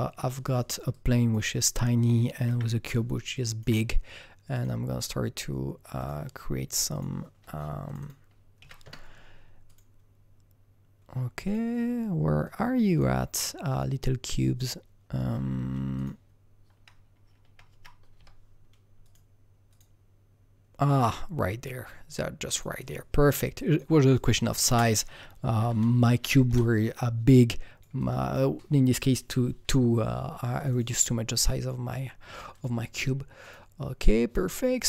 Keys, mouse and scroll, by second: 0.3 alt+double right click, 0.5 alt+right click, 0.9-3.3 alt+drag, 1.4 alt+right click, 2.4 q, 4.5 alt+click, 5.9 alt+click, 6.9 click, 7.8 click, 8.0 double click, 8.6 KP_1, 8.8 KP_Enter, 9.6 click, 11.4 click, 12.4-15.4 drag, 15.9-18.1 drag, 17.7 Left, 18.1 BackSpace, 19.0 click, 19.7 click, 22.5 click, 24.0 click, 24.6 ctrl+space, 25.0-25.6 typing, 26.1 Down, 26.4 Return, 27.2-33.4 drag, 33.4-34.8 drag.